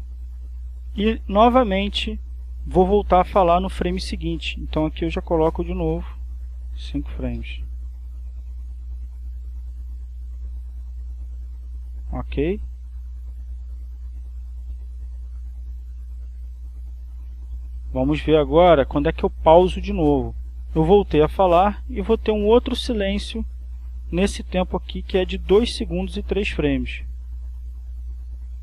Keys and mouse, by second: 3.2-4.9 drag, 5.6 click, 6.8 5, 7.2 f, 9.2-12.2 drag, 12.4-18.4 drag, 19.1 click, 19.9 click, 22.1 click, 27.2-28.6 drag.